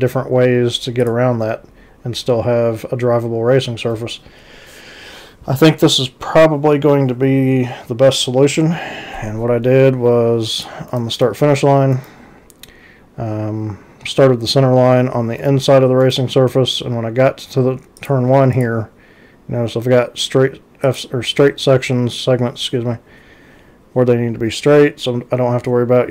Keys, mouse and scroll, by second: 1.0 click, 10.6 click, 10.9 ctrl+c, 15.4 ctrl+c, 18.0 click, 18.5 click, 20.9 click.